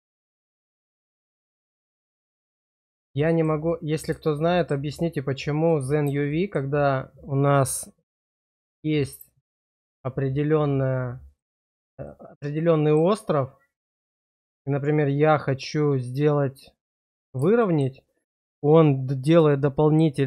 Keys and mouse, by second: 0.5 click, 1.1 shift+click, 1.7-3.0 drag, 3.2 shift+click, 3.6 click, 4.5 shift+click, 5.7 click, 6.2 shift+click, 8.7 click, 11.4 click, 12.1 shift+click, 12.7 click, 17.0 click, 19.6 shift+click.